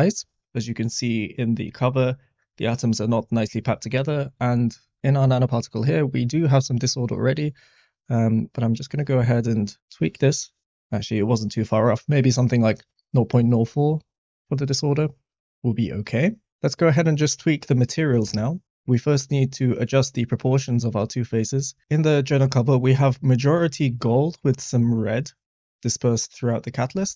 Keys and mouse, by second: 7.1-10.6 drag, 26.9 typing.